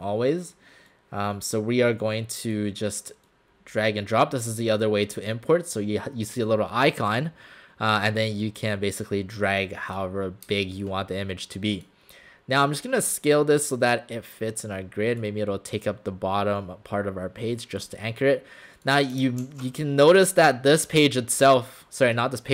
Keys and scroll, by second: 10.5 space.